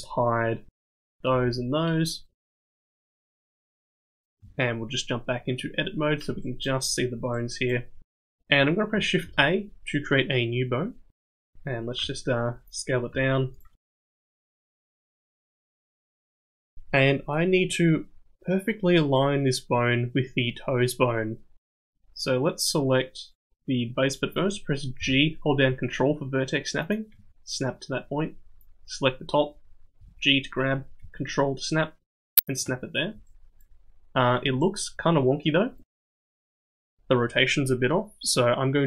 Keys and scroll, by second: 0.6 h, 1.3 h, 4.4 Tab, 9.2 shift+a, 12.0 s, 13.1 s, 13.7 g, 14.8 s, 15.5 g, 24.9 g, 29.9 g.